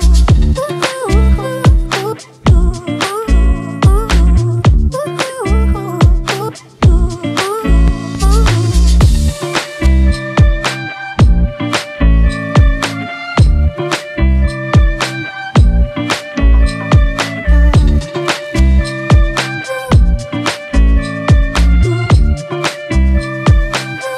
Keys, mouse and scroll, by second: 2.9 ctrl+-, 6.8 alt+right click.